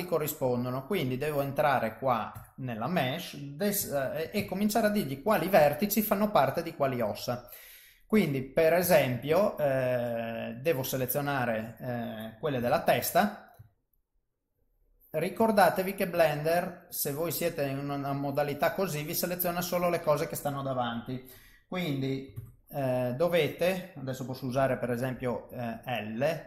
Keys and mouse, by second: 1.0 click, 2.5 Tab, 3.8 a, 4.4 alt+a, 4.9 middle click, 6.6 middle click, 8.9 ctrl+middle click, 9.4 middle click, 10.3 shift+middle click, 11.1 middle click, 12.6 KP_3, 13.8 ctrl+right click, 16.0 middle click, 18.8 middle click, 22.4 alt+a, 22.6 middle click, 24.6 l, 25.2 l, 25.9 middle click.